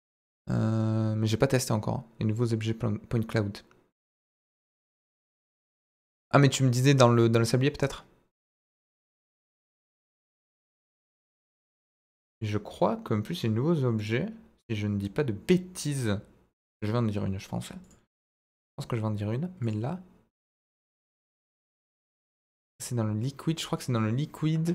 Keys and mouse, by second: 12.3 click, 14.0 click, 16.6 click, 18.5 click, 19.7-22.0 drag.